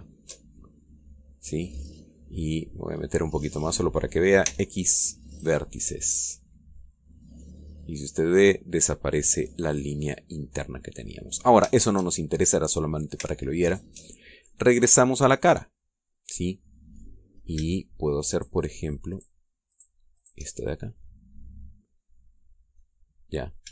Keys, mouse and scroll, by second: 0.1 alt+shift+right click, 1.2-1.8 alt+shift+scroll down 2, 1.9-3.0 middle drag, 3.7-4.0 scroll up 2, 4.1 middle click, 5.2 x, 6.1 click, 6.7 scroll down 2, 7.2-8.3 middle drag, 8.8-12.1 middle drag, 12.5 shift+middle click, 12.9 shift+click, 14.4 alt+shift+right click, 14.9 alt+shift+scroll down 1, 15.3-17.9 middle drag, 18.1 scroll up 1, 19.1 shift+right click, 19.9 shift+right click, 20.5 shift+right click, 20.9 shift+right click, 21.3 shift+middle click, 21.4-22.5 shift+drag.